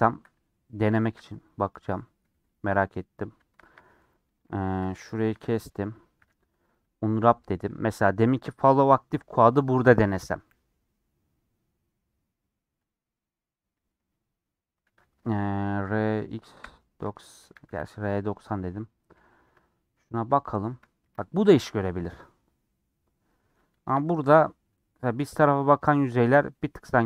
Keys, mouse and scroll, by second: 0.0 shift+middle click, 0.4 Tab, 0.6 shift+middle click, 1.8 scroll up 2, 2.4 3, 3.7 alt+click, 4.5 ctrl+z, 6.2 a, 7.8-15.3 drag, 15.3 r, 18.6 scroll up 1, 18.8-21.0 middle drag, 21.0 KP_Decimal, 21.7 scroll down 1, 21.7 middle click, 22.3-23.2 scroll up 2, 23.2 middle click, 24.1-24.6 scroll up 2, 24.6-25.7 middle drag, 25.7 scroll down 1, 25.9 middle click, 26.4 scroll down 1, 26.6 middle click, 26.9-27.0 scroll up 1.